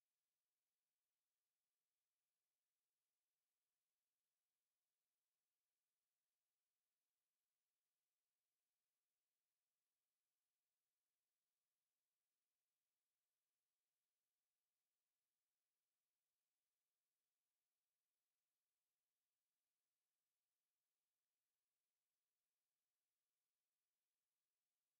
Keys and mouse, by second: 0.0 shift+click, 0.6 alt+click, 2.0 alt+right click, 2.5 right click, 4.2 click, 4.8 alt+click, 5.4 shift+right click, 7.5 alt+click, 8.8 click, 9.3 alt+click, 9.8 alt+right click, 10.3 alt+click, 10.8 shift+right click, 12.6 w, 13.7 click, 16.9 alt+click, 17.6 alt+click, 18.0 alt+right click, 18.4 alt+click, 18.7 alt+middle click, 19.1 alt+click, 19.6 click, 20.0 alt+click, 20.6 click, 21.0 right click.